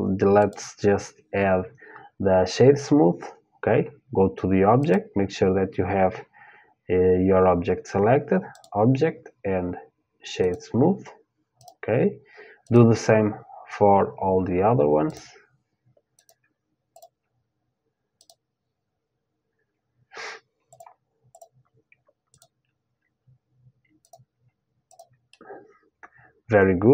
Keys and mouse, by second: 0.0-3.5 drag, 4.4-6.4 drag, 8.2-10.1 drag, 11.2-14.2 drag, 14.7-20.4 drag, 20.9-23.9 drag, 24.5-26.5 drag, 24.9-25.9 middle drag, 26.5 middle click.